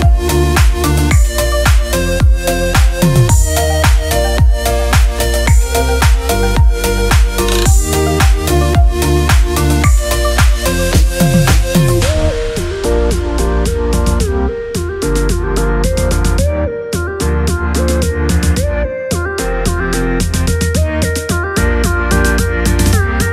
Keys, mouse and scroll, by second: 17.6 click.